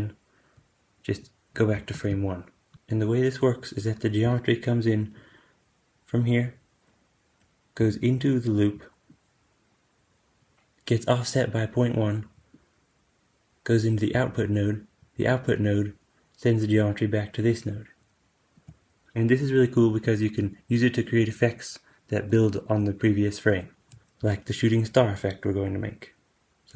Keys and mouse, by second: 1.8 shift+Left, 1.8 shift+click, 8.6 d, 8.9 d, 9.0-26.7 drag, 9.0 d, 10.3 d, 12.3 d, 13.9 d, 14.1 d, 14.9 d, 18.4 d, 18.5 d, 26.2 super+z.